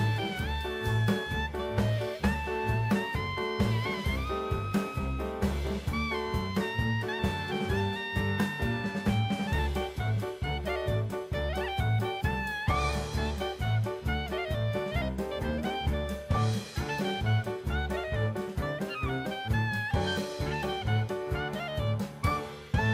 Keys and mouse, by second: 3.0-3.4 shift+middle drag, 10.0-11.3 drag, 13.9 click, 14.7 click, 15.2-17.4 right drag, 18.7-20.9 drag, 21.1-22.4 right drag.